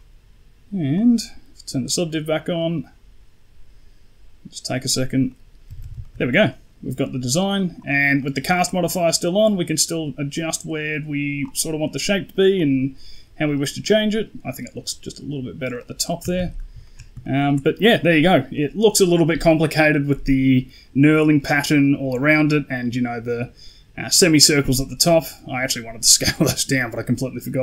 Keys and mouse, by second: 4.8 click, 5.2 middle drag, 5.5 a, 5.8 a, 5.9 shift+middle drag, 6.3 middle drag, 7.4 right click, 7.6 right click, 8.1 middle click, 9.1-11.5 drag, 11.5 middle click, 12.5-15.7 drag, 15.9 middle click, 16.1 a, 16.5 a, 16.7 shift+middle click, 17.1 ctrl+middle drag, 17.6 right click, 18.4 middle click, 21.3 middle drag, 24.7 middle click, 26.6 middle click.